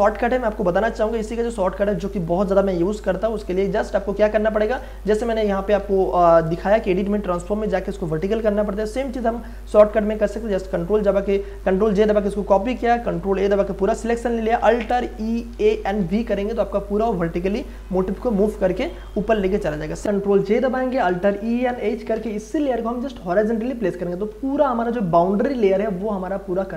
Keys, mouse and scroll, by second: 3.4 ctrl+alt+z, 5.0 ctrl+d, 5.8 Delete, 11.5 ctrl+j, 13.3 ctrl+a, 15.0 alt+e, 15.3-16.5 typing, 20.0 ctrl+click, 20.4 ctrl+j, 21.1 ctrl+a, 21.4 alt+e, 21.5-22.6 typing, 24.6 ctrl+d.